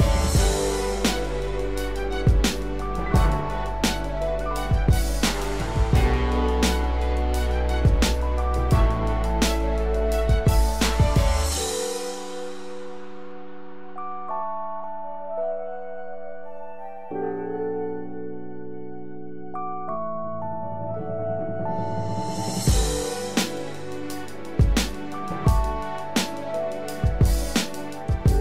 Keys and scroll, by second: 7.1 ctrl+0, 8.6 ctrl+=, 11.9 ctrl+-, 16.9 ctrl+z, 19.3 ctrl+=, 23.9 ctrl+z, 26.5 ctrl+-.